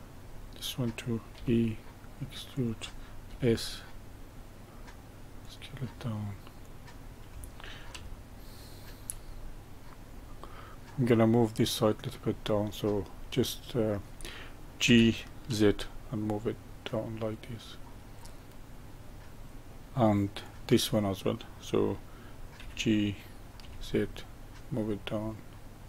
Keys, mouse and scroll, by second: 1.3 e, 3.2 s, 6.6 click, 8.1-10.1 shift+middle drag, 10.1 scroll down 1, 10.5-12.4 middle drag, 12.4 click, 13.1-14.8 middle drag, 14.8 g, 18.0-19.8 middle drag, 20.4 click, 22.6 g.